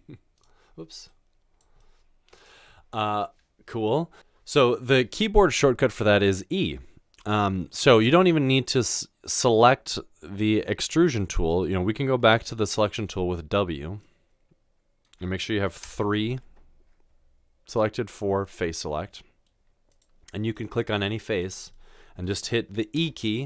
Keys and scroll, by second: 13.1 w, 15.8 w, 23.0 e.